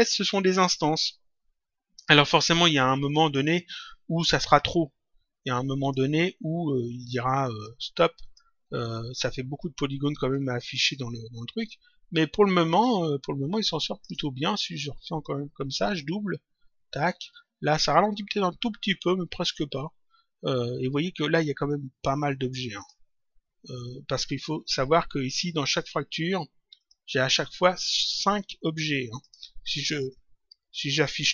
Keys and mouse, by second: 2.6 click, 5.7 click, 8.1 shift+click, 10.3 ctrl+click, 15.1 click, 22.7 click, 26.7 click, 29.1 shift+click, 30.5 alt+g.